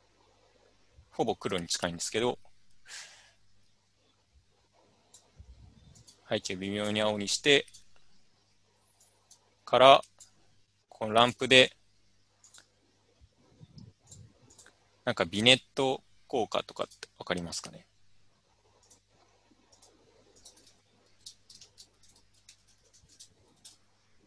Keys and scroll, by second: 20.7-24.2 typing.